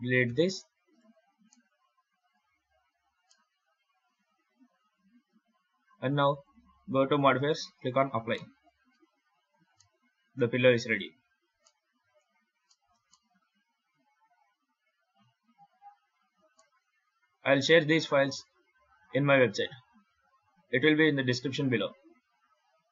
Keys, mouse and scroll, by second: 0.1 x, 0.8 right click, 1.3 middle click, 3.9 middle click, 6.2 click, 7.7 click, 8.2 middle click, 8.8 Tab, 9.2-9.6 scroll up 4, 9.6 middle click, 10.9 Tab, 11.5 middle click, 12.1 scroll down 4, 12.5 shift+middle click, 13.0 middle click, 16.4 shift+middle click, 16.9 scroll up 2.